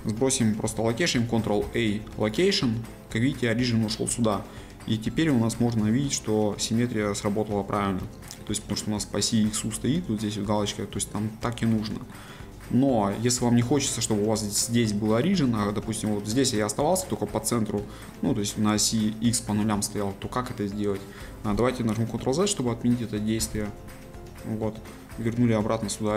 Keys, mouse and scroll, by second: 4.9-5.3 scroll up 2, 5.3-12.3 middle drag, 12.3-13.1 scroll down 2, 13.1 scroll down 1, 13.1-13.8 scroll up 2, 13.8-15.4 scroll down 2, 15.4-15.9 scroll up 2, 15.9-22.9 middle drag, 24.8-26.1 middle drag.